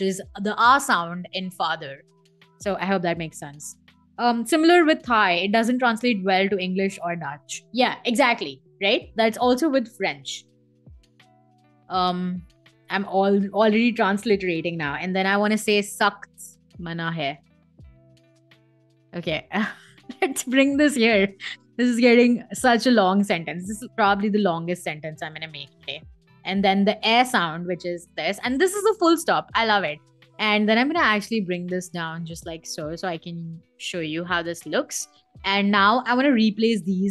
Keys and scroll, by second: 9.2-11.8 typing, 13.0 BackSpace, 14.9 shift+k, 18.0 t, 18.9 Escape, 23.2-26.3 typing, 28.3 Escape, 34.1 v.